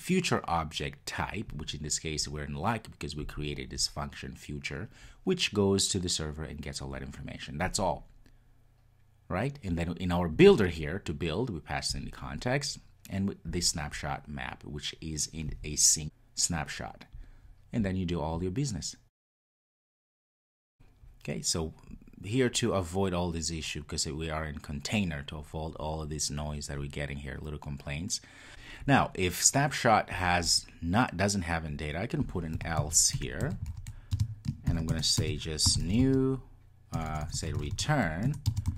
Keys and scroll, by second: 38.3 Return.